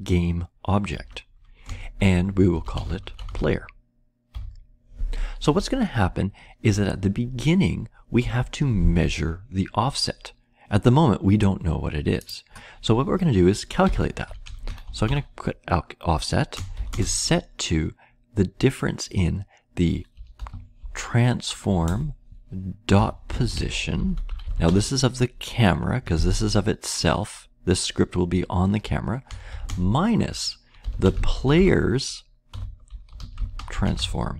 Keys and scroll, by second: 0.9 Return, 2.2-4.2 typing, 13.5-17.3 typing, 19.8-21.2 typing, 21.8 Return, 22.7-25.1 typing, 29.0-34.3 typing.